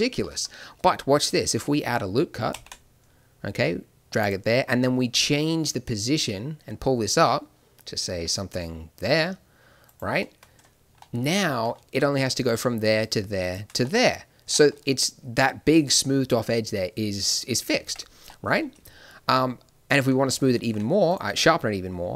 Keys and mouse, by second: 2.4 ctrl+r, 10.1 middle click, 12.3-17.6 drag, 14.4 Tab, 17.6 middle click, 17.8 Tab, 20.6 ctrl+r.